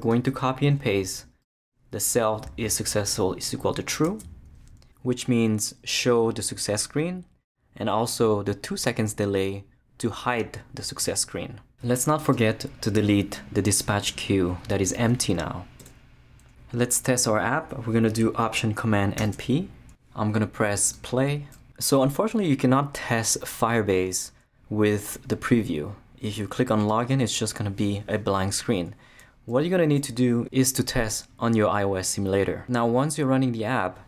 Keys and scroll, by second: 4.1 super+x, 5.8 super+v, 15.8 shift+BackSpace, 19.2 alt+super+p, 31.4 super+r.